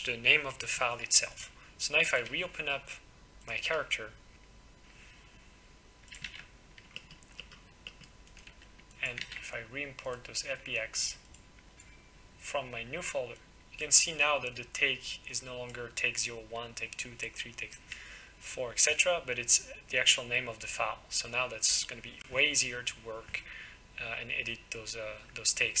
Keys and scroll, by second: 6.3 ctrl+w.